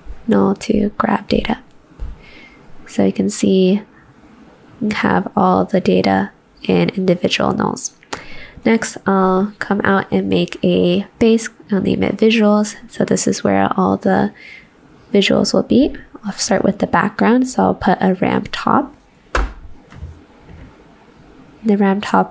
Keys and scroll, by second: 0.0-0.8 typing.